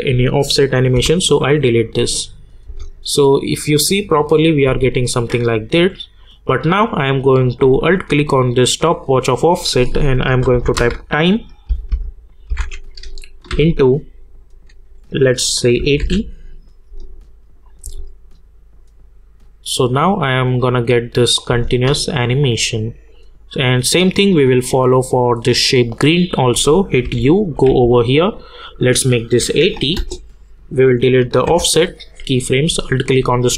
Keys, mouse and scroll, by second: 2.3 click, 2.7 space, 4.6 space, 6.2-7.9 drag, 10.0-11.3 typing, 12.5-13.5 typing, 15.5-16.5 typing, 17.6 click, 17.8 space, 21.5 space, 22.3-25.2 drag, 25.6 click, 27.0 u, 27.7 k, 28.7 click, 29.9 Return, 30.7 click, 33.0 alt+click.